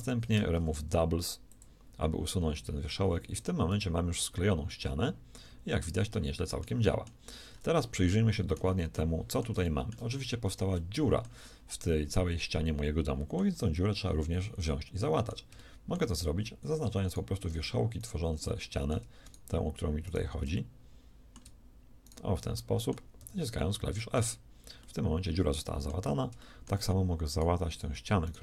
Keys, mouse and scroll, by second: 0.0-0.4 typing, 2.9 a, 3.2 click, 3.5 g, 8.5 z, 17.3-19.9 shift+middle drag, 23.2 f.